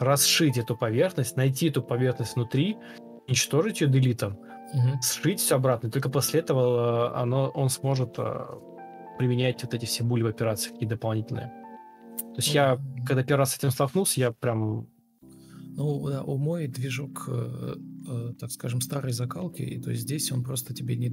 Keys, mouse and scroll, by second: 1.3 ctrl+z, 1.5 ctrl+z, 2.3 ctrl+l, 2.4 ctrl+click, 4.1 typing, 4.2 Return, 5.5 ctrl+click, 5.6-6.4 typing, 8.7 Return, 8.7-9.5 typing, 9.6 Return, 12.5 space, 14.8 ctrl+space.